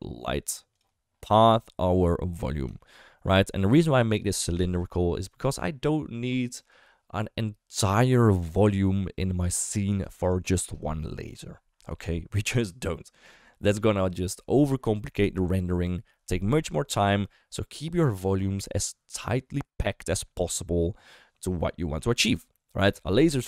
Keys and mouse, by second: 2.8 shift+middle click.